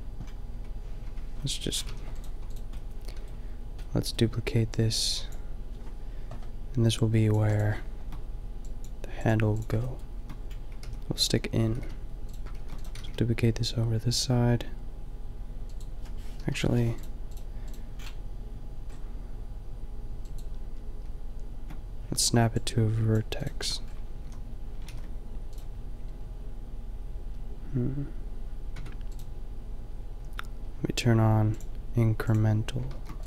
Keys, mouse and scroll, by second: 0.5 Tab, 1.1 Tab, 1.9 a, 2.2 right click, 10.9 g, 11.3-13.2 drag, 11.8 g, 12.6 shift+d, 13.0 g, 16.4 Delete, 18.0 middle click, 22.6-23.1 drag, 23.5 Tab, 24.2 a, 24.9 ctrl+r, 28.8 Tab, 29.2-33.1 drag, 32.9 shift+d.